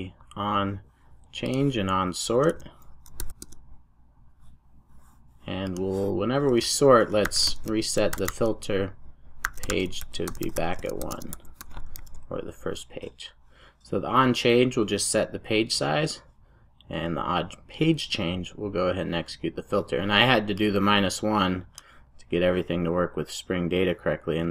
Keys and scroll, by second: 3.2 super+j, 3.5 Return, 11.9 super+s.